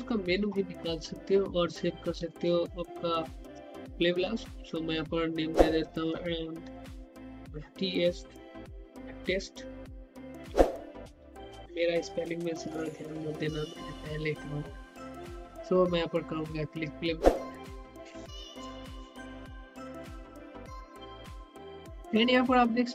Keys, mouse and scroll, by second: 0.0 click, 0.9 scroll down 1, 2.2 click, 4.9 click, 7.8-8.7 typing, 12.4-13.6 typing, 18.2-22.9 drag.